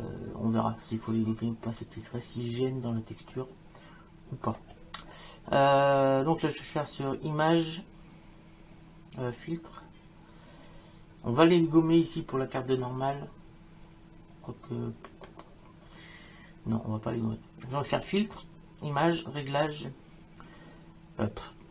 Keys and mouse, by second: 18.0 click.